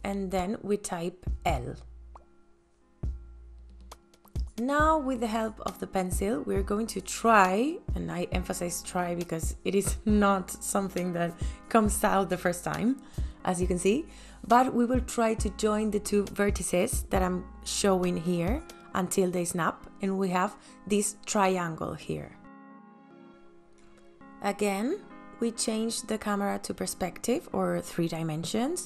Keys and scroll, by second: 3.6 l.